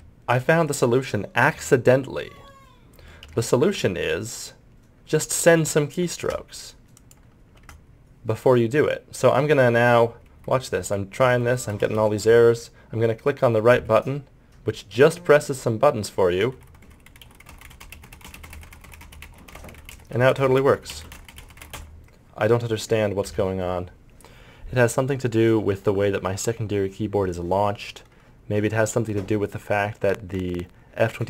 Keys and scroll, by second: 10.3 Insert, 10.5 Home, 10.7 Page_Up, 11.0 Delete, 11.2 End, 11.4 Page_Up, 11.5 Insert, 11.7 Home, 11.8 Page_Up, 11.9 End, 12.0 Page_Down, 12.2 Home, 12.3 Page_Up, 13.7 Right, 16.4 Delete, 16.5 End, 16.5 Page_Down, 16.8 Insert, 16.8 Home, 16.9 Page_Up, 17.1 Delete, 17.2 End, 17.4 Home, 17.5 Page_Up, 17.6 Delete, 17.7 Page_Down, 17.8 Delete, 17.9 Page_Up, 18.0 Delete, 18.1 Page_Up, 18.3 Delete, 18.3 Page_Up, 18.4 Delete, 18.6 Page_Up, 18.6 Insert, 18.7 Page_Up, 18.8 Insert, 19.0 End, 19.1 Page_Down, 19.2 Delete, 19.5 Insert, 19.5 Home, 19.7 Page_Up, 19.7 Delete, 20.3 Insert, 20.4 Home, 20.4 Page_Up, 20.6 Delete, 20.9 Page_Down, 21.1 Delete, 21.1 Home, 21.3 Delete, 21.4 End, 21.5 Delete, 21.6 Home, 21.6 Page_Up.